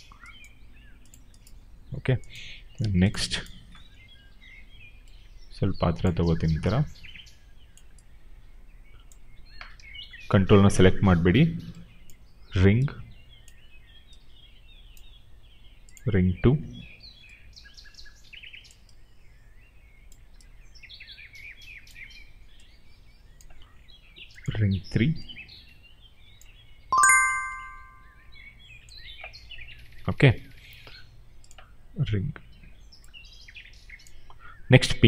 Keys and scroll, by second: 9.7 ctrl+z.